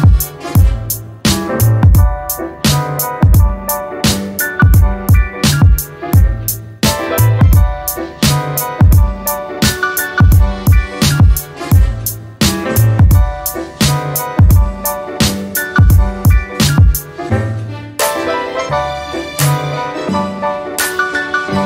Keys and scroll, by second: 15.3 a.